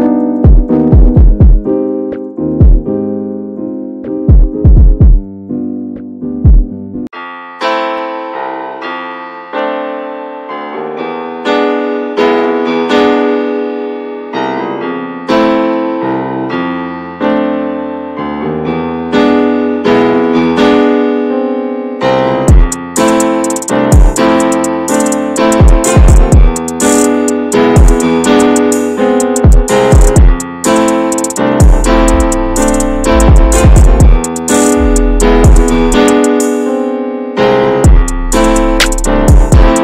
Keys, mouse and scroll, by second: 1.2-2.8 shift+middle drag, 2.8-8.3 drag, 8.3 shift+middle click, 8.9 ctrl+z, 10.5 scroll up 1, 12.2-14.7 right drag, 14.7-17.1 drag, 17.1-18.2 shift+middle drag, 18.2 ctrl+z, 21.8 click, 22.1-23.7 shift+middle drag, 23.7 click, 24.0 shift+middle click, 24.6 ctrl+z, 27.9-32.9 drag, 32.9-34.4 shift+middle drag, 34.4 click, 34.4 scroll down 4, 34.6 scroll up 1, 34.8 shift+middle click, 35.2-35.9 scroll up 1, 36.0-39.8 drag.